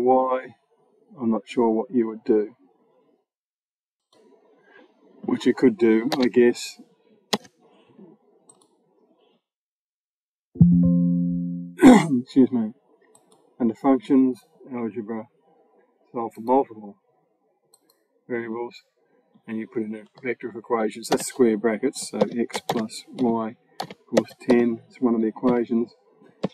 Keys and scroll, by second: 6.0 BackSpace, 7.2 BackSpace, 9.4 BackSpace, 20.9 [, 22.0-24.0 typing, 26.3 x.